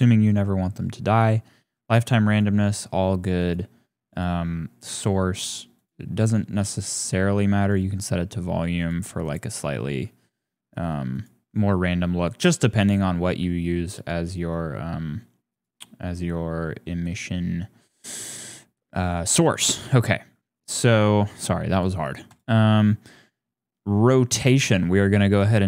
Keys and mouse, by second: 2.3 click, 3.3 click, 4.2 click, 5.7 click, 6.8 click, 8.8 click, 11.1 click, 14.0 click, 15.5 click, 22.3 click.